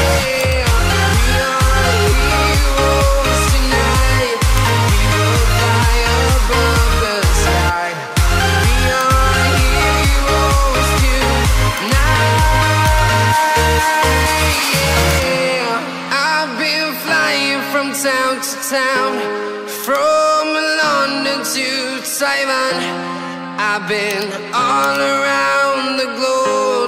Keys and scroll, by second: 3.7 ctrl+z, 5.7 ctrl+t, 6.9 Return, 8.3 ctrl+d, 9.8 ctrl+t.